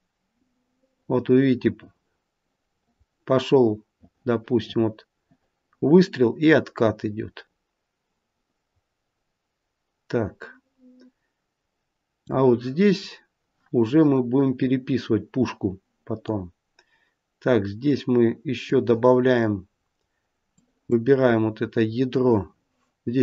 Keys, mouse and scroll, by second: 16.2 click, 19.0-20.4 scroll down 3, 20.4 click, 21.4-22.3 scroll down 1.